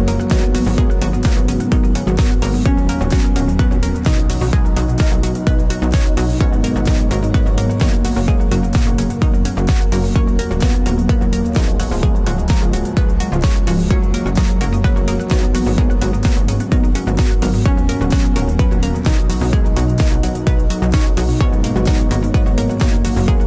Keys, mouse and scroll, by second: 0.4 KP_3, 0.6 e, 6.7 click, 6.8-7.9 middle drag, 7.9 click, 8.5 middle click, 11.0 click, 11.2-12.6 scroll up 2, 12.6-13.6 scroll up 1, 13.6 scroll up 1, 13.7 middle click, 14.3 click, 14.6 middle click, 14.8 scroll down 2, 14.9-18.0 typing, 15.2 click, 15.6 click, 16.0 click, 16.7 click, 17.0 middle click, 17.3 click, 17.8 click, 17.9 shift+click, 18.1 middle click, 18.4 click, 18.6 middle click, 19.1 click, 19.7 shift+click, 19.8 f, 19.9 middle click, 20.9 click, 21.3 middle click, 21.7 ctrl+z, 22.4 middle click.